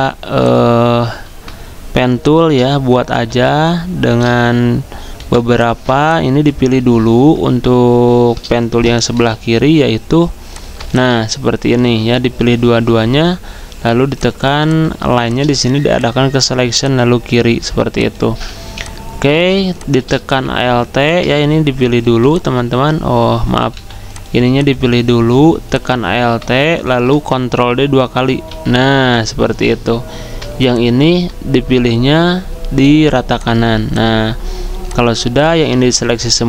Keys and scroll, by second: 5.9-6.6 typing, 18.6 z, 19.5 z, 22.0 v, 28.4 ctrl+d.